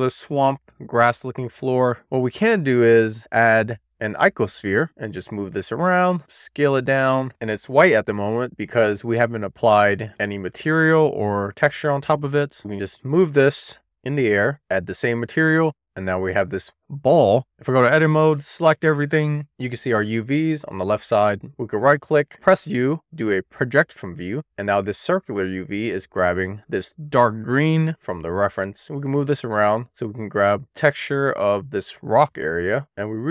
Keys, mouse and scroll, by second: 0.0 middle click, 1.6 click, 3.0 shift+a, 4.9 click, 5.2 w, 5.4 click, 6.2 e, 6.5 r, 6.9 click, 7.1 w, 7.5 click, 15.0 click, 18.5 Tab, 19.8 a, 21.7 u, 25.9-27.7 scroll up 3, 27.7 scroll up 1, 27.8 shift+middle click, 28.9 click, 29.7 scroll down 1, 29.8 shift+middle click, 30.2-30.8 scroll up 1, 30.8 click, 32.7 middle click, 32.9-33.3 scroll up 1.